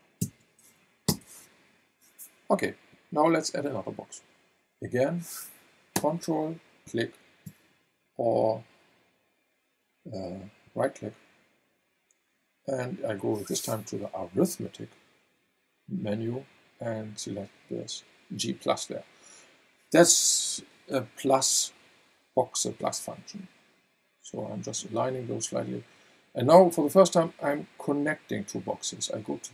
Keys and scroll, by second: 0.2 KP_1, 1.1 Return.